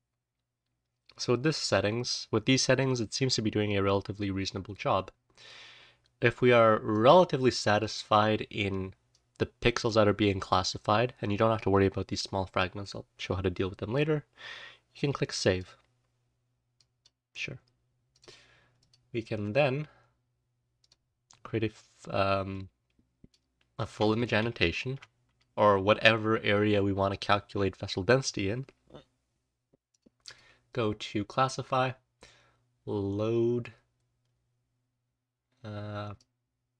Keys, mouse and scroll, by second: 2.7-5.4 drag, 6.9-7.7 drag, 9.0-13.9 drag, 18.7 click, 20.7 click, 21.1-21.7 scroll down 1, 22.5-23.2 drag, 24.9 ctrl+shift+a, 30.2 click.